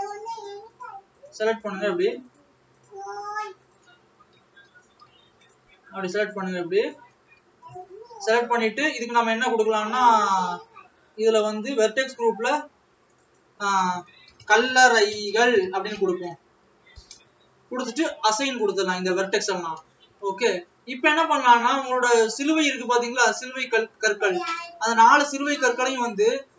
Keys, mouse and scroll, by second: 3.5 click, 5.4 click.